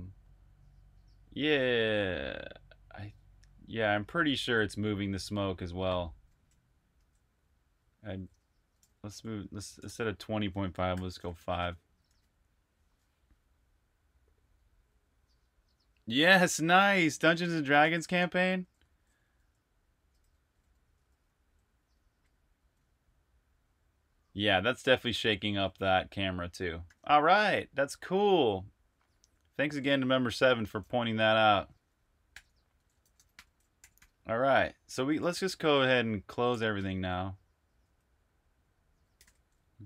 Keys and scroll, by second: 7.0 super+q, 8.1-8.7 typing, 9.8-13.2 typing, 18.2-22.5 typing, 26.8 super+q, 31.7-37.1 typing, 39.1-39.7 typing.